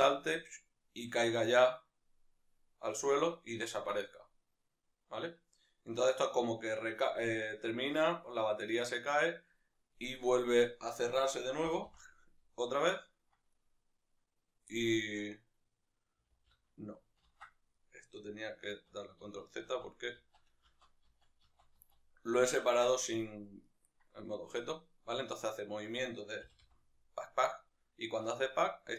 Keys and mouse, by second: 9.6 right click, 9.9-10.6 middle drag, 10.6-11.7 right drag, 11.7 g, 14.7-28.9 middle drag, 16.3 alt+g, 17.2 ctrl+z, 18.7 ctrl+z, 26.5 g.